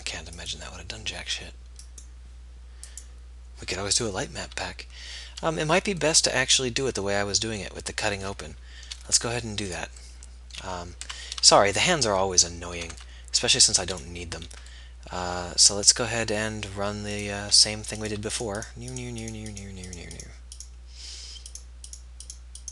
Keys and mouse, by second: 0.4-2.2 drag, 2.2-7.1 middle drag, 7.1-9.2 drag, 9.2 middle click, 10.0-11.4 middle drag, 11.4 Tab, 12.8 middle click, 13.3 Tab, 17.8 z.